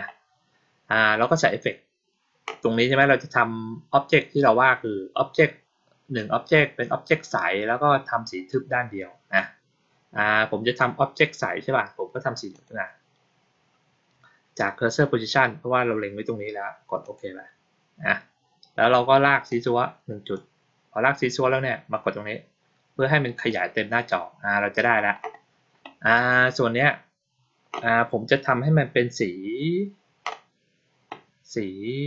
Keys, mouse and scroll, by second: 12.4 click, 16.9 click, 19.4 click, 23.2 click.